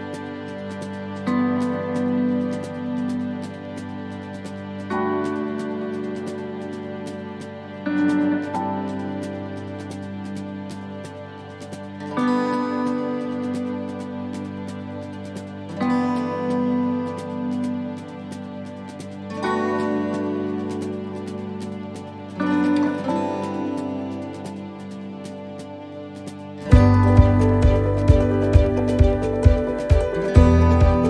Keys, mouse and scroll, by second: 0.5 middle click, 1.9 middle click, 2.4 middle click, 3.6 right click, 4.2 alt+shift+right click, 5.1 middle click, 9.6 click, 9.6 middle click, 10.0 scroll down 2, 10.5 middle click, 11.0 shift+middle click, 11.4-11.7 scroll up 1, 11.7 middle click, 13.1-13.4 scroll down 2, 13.4 middle click, 14.0 shift+middle click, 14.3 scroll up 1, 14.5 middle click, 14.9-15.2 scroll down 1, 15.7 scroll up 1, 15.8 click, 17.0 right click, 17.9 click, 20.0 click, 23.3 click, 23.3 middle click, 23.6-24.8 scroll down 2, 24.1 shift+middle click, 24.8 scroll up 1, 25.2 middle click, 25.8-26.2 scroll up 1.